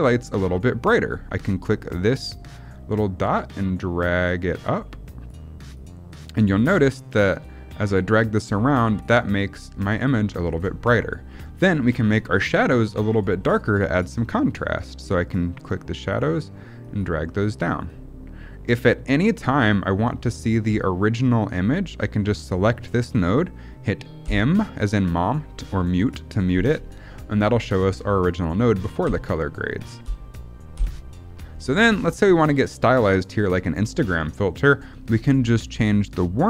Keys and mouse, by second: 2.2-5.3 drag, 5.7 click, 6.5 click, 7.8 click, 8.8 click, 10.8 middle click, 15.5-16.1 drag, 16.7 click, 17.5 click, 18.6 click, 22.4 click, 24.1 m, 28.9 m, 29.9 m, 30.7 m, 31.9 middle click.